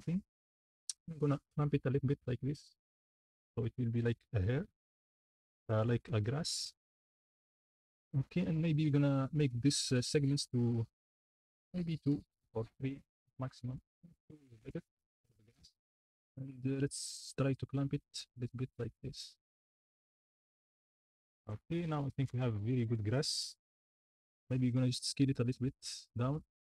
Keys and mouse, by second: 7.7 shift+middle click, 10.4 middle click, 11.2 middle click, 17.8 shift+click, 17.9-18.9 shift+middle drag, 18.9-21.5 shift+drag, 26.0-26.6 shift+middle drag.